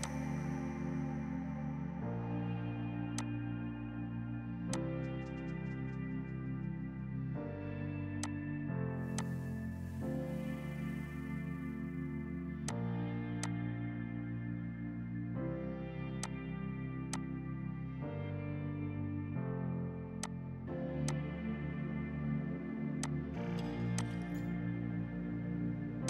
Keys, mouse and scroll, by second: 0.4 Delete, 1.0 space, 2.2 F4, 3.2 click, 6.6 shift+F2, 8.2 click, 8.7 right click, 9.2 click.